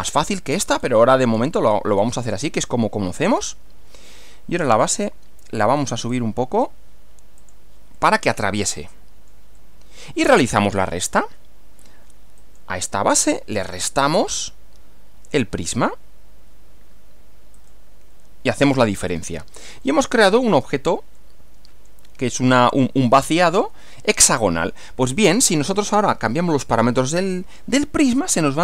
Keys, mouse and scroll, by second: 0.1-0.6 scroll down 4, 0.6 scroll up 2, 0.8-1.9 scroll down 2, 3.4 scroll down 1, 4.8 click, 5.6-6.3 scroll up 2, 6.6 scroll up 2, 7.4 click, 8.0-9.5 middle drag, 12.4 click, 14.2 ctrl+click, 17.6 click, 19.1-19.5 scroll down 2, 19.8-20.9 middle drag, 21.2 middle click, 23.3-25.0 middle drag, 26.0 scroll up 2.